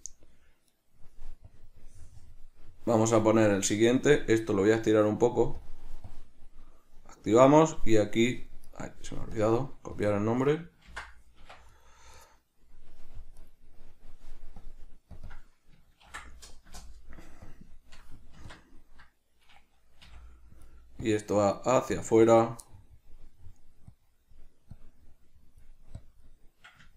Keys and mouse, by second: 0.0 Tab, 0.0 click, 0.9 right click, 1.6-2.7 drag, 2.7-3.7 middle drag, 3.7 click, 4.7-5.8 drag, 6.2-7.4 drag, 7.4 right click, 8.8 right drag, 9.5 click, 10.1 click, 10.3-11.9 drag, 11.7 Escape, 11.9 right click, 12.3 right click, 13.5 right click, 14.7-15.3 drag, 15.4-18.6 drag, 16.9 Return, 18.4 Tab, 22.8 middle click.